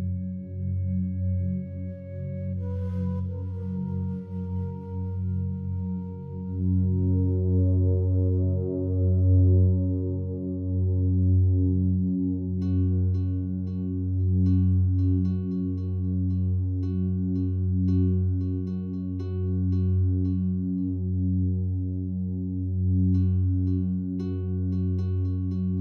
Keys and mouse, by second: 0.5 alt+click, 2.1 1, 2.5 alt+shift+click, 4.1-5.3 drag, 5.5 ctrl+z, 6.6 click, 8.4 ctrl+alt+click, 9.3 alt+shift+click, 10.1-11.2 alt+drag, 11.4 alt+click, 12.9 click, 15.0 ctrl+s, 15.4-16.6 alt+drag, 17.0 ctrl+alt+click, 17.4 alt+shift+drag, 17.9 ctrl+alt+click, 18.4-21.8 alt+drag, 23.8 click, 24.8 click.